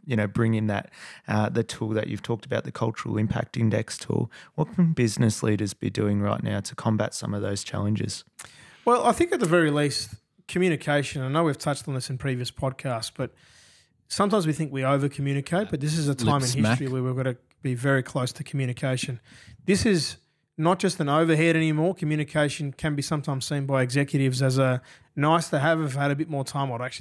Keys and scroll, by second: 17.3 Delete, 18.4 f, 19.5 Delete, 19.5 f, 21.6 Delete, 24.0 super+[, 24.1 super+[, 24.2 super+[, 25.9 F8.